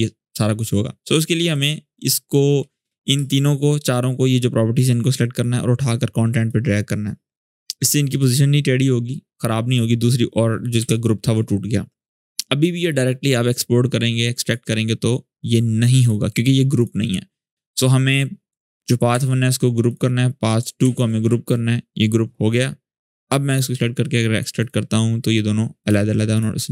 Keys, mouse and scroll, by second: 1.2 click, 1.3 click, 3.1-6.5 shift+drag, 9.4 click, 12.0 click, 14.2 click, 18.9 ctrl+g, 19.6 click, 20.6 ctrl+g, 23.0 click.